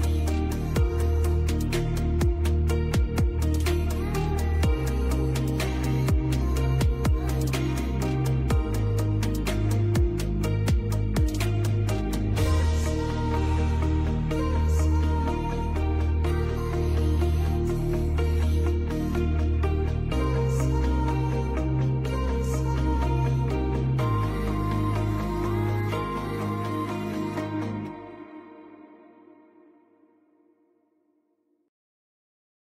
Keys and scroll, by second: 1.0 shift+Page_Up, 3.3 shift+Page_Up, 3.5 Escape, 17.9 Escape, 19.1 F2, 21.8 F3, 22.4 Escape, 23.4 F2, 25.4 F3, 32.4 shift+Page_Up.